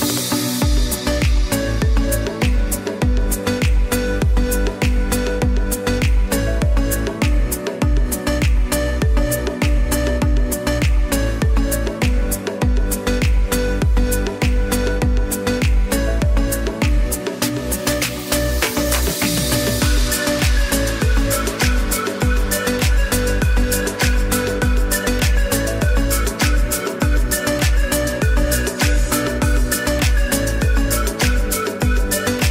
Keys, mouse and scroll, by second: 1.1 click, 6.7 click, 12.7 space, 12.9 click, 13.2 space, 13.4 click, 13.8 space, 14.7 ctrl+j, 16.6 ctrl+a, 22.4 click, 23.9 space, 24.0 click.